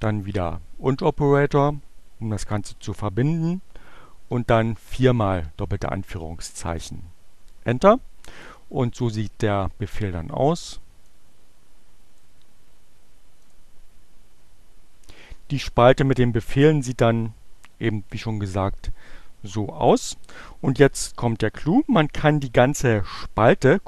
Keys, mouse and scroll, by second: 2.5 shift+2, 5.3 Return, 9.1 click, 10.5-12.5 drag, 13.3 click.